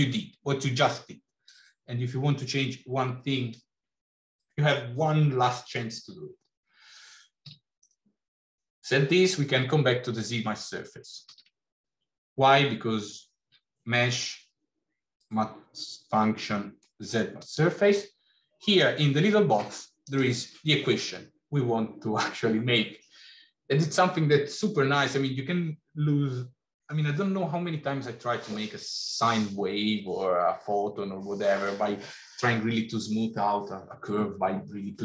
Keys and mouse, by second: 1.3-3.3 drag, 7.3 x, 11.1 shift+a, 19.8-35.0 drag.